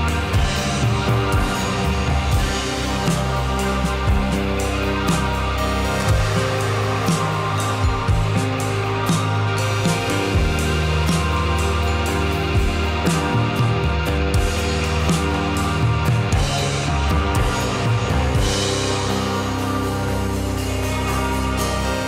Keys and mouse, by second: 0.0-1.5 middle drag, 2.8 click, 3.9 click, 4.2 click, 6.0-6.4 shift+drag, 6.6 click, 8.5 shift+click, 10.0-11.8 shift+middle drag.